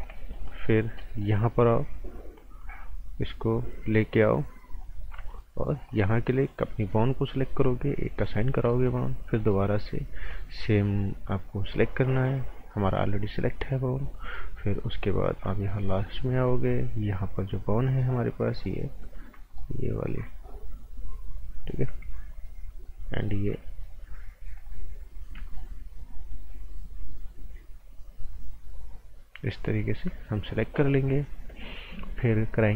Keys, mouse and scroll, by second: 0.2 right click, 0.8 scroll up 1, 1.0 right click, 2.8 ctrl+shift+click, 5.8 click, 8.5 scroll down 1, 8.7 right click, 9.4 alt+right click, 11.3 scroll up 1, 11.5 right click, 12.1 alt+right click, 13.9 click, 14.3 right click, 15.6 alt+right click, 16.4 scroll up 1, 18.6 click, 19.5 click, 20.1 shift+click, 23.0 ctrl+shift+click, 24.6 click, 25.4 click.